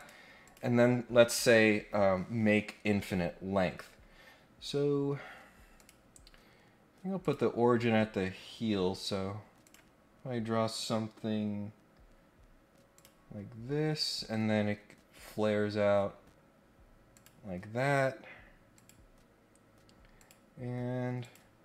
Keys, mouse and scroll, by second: 0.4 click, 5.7 click, 7.2 click, 9.6 click, 12.9 click, 13.3 scroll up 2, 13.7-14.6 scroll down 4, 16.0 scroll up 2, 17.1 click, 18.7 click, 20.1 click, 21.2 click.